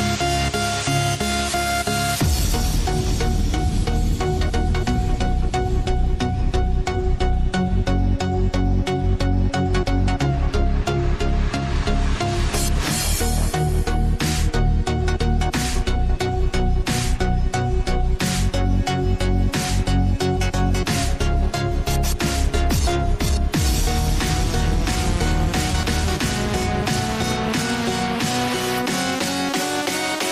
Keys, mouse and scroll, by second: 1.2 click, 5.6 click, 6.6 b, 8.3 click, 10.8 click, 12.3 Tab, 12.8 scroll up 1, 15.3 click, 16.4 click, 17.3 click, 18.1-21.1 drag, 21.6 click, 22.4-23.5 drag, 27.3 click, 29.0 click, 29.8-30.3 drag.